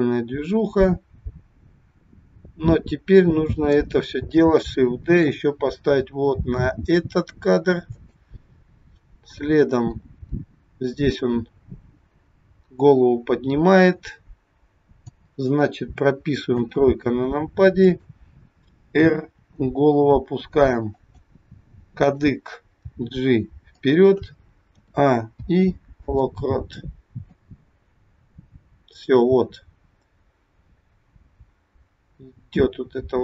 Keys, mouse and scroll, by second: 5.2 shift+d, 9.4 click, 16.4 KP_3, 17.8 click, 19.3 r, 21.9 click, 22.9 g, 24.8 a, 25.3 i, 27.3 click.